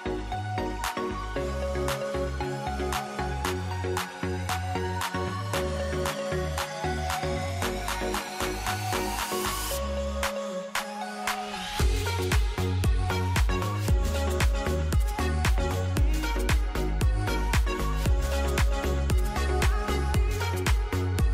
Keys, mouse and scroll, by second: 8.7 r, 11.9 ctrl+d.